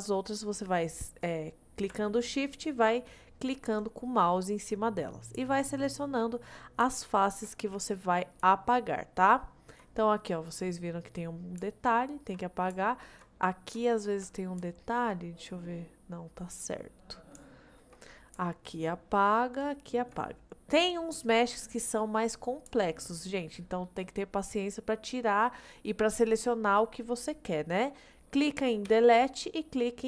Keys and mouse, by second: 3.8 shift+click, 5.7 shift+middle click, 8.7 shift+middle click, 11.8 shift+middle click, 12.9 shift+middle click, 13.9 shift+middle click, 14.8 shift+middle click, 17.6 shift+middle click, 22.9 shift+middle click, 28.9 Delete.